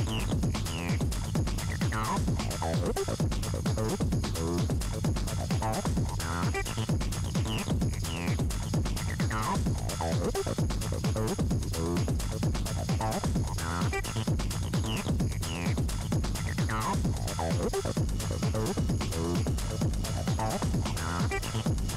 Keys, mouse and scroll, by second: 1.6 Tab, 2.4 Tab, 3.2 scroll up 1, 3.7-4.9 scroll up 3, 4.9-6.9 scroll up 7, 6.9-9.1 scroll up 5, 9.1-9.5 scroll down 7, 9.5-10.0 scroll up 1, 10.0-11.3 scroll up 16, 11.3-13.9 scroll down 39, 14.2-15.4 scroll up 4, 16.6-19.8 scroll up 9, 19.8-21.0 scroll down 1, 21.0-21.8 scroll up 2.